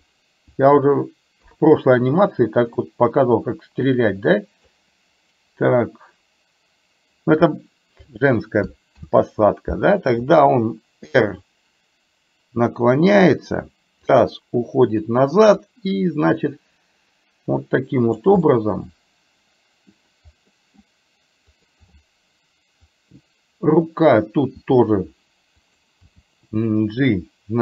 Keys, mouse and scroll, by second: 1.6 KP_3, 2.9-4.8 drag, 9.1 ctrl+z, 11.2 r, 14.1-15.2 drag, 15.8-18.3 drag, 18.4-19.7 scroll up 1, 19.7 middle click, 20.6 scroll up 1, 20.8-21.4 scroll down 1, 21.7 click, 22.9-24.2 drag, 24.7 r, 26.1 g.